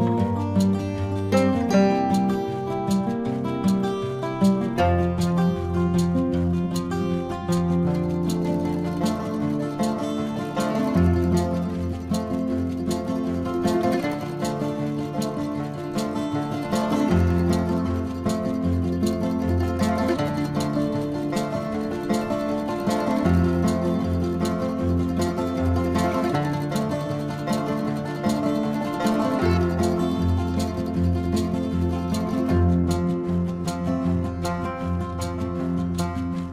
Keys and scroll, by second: 0.5 space, 2.9 space, 5.6 space, 6.3 space, 7.5 ctrl+alt+z, 8.0 ctrl+alt+z, 9.1 ctrl+alt+z, 11.5 space, 17.3 space, 17.9 space, 18.5 space, 20.3 ctrl+-, 20.7 space, 22.8 ctrl+-, 23.9 space, 24.3 space, 28.0 ctrl+alt+z, 30.7 ctrl+=, 31.2 ctrl+=, 31.4 space, 32.9 ctrl+=, 33.6 ctrl+-.